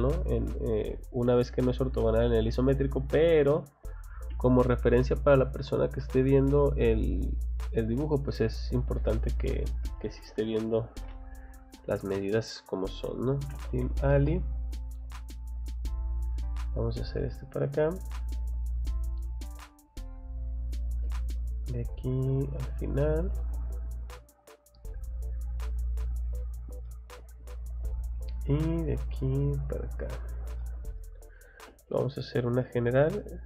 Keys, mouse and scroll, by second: 4.3 space, 6.6-6.9 scroll up 2, 7.6 scroll down 2, 9.8 scroll down 2, 10.2 middle click, 12.1 Escape, 12.8-14.5 typing, 15.4 middle click, 15.4 scroll up 2, 16.3 click, 17.3 middle click, 17.9 scroll up 2, 19.1 click, 19.8 click, 21.3 click, 21.6-22.5 scroll up 1, 22.5 click, 22.7 scroll down 1, 24.7 click, 26.0 click, 26.4 scroll down 1, 26.8 middle click, 27.2 space, 27.9 click, 28.9 click, 29.7 click, 30.3 Escape, 30.6 middle click, 31.0 scroll down 2, 31.4 scroll up 2, 32.0 scroll up 2, 33.0 click, 33.3-33.4 scroll down 4.